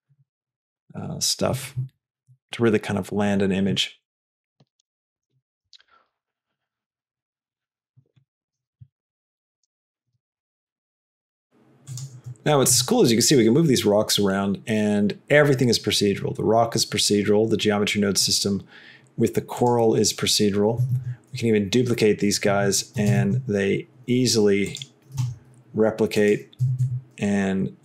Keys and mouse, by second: 5.8 g, 10.3 g, 13.0 g, 21.1 shift+d, 23.2 g, 25.4 g, 26.8 s.